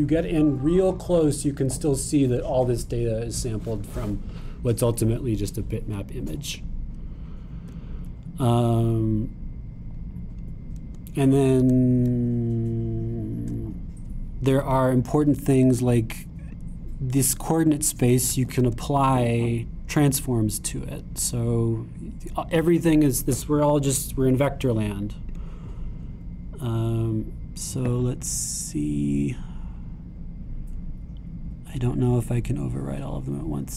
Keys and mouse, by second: 8.5-11.0 super+drag, 13.9 super+click, 14.5-18.8 drag, 19.5 shift+a, 23.8-33.3 drag.